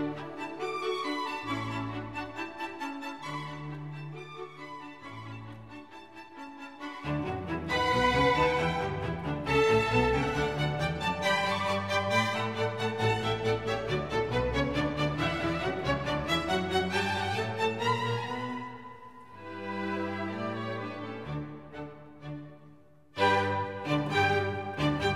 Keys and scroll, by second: 0.0 typing, 6.7 Right, 16.1 d.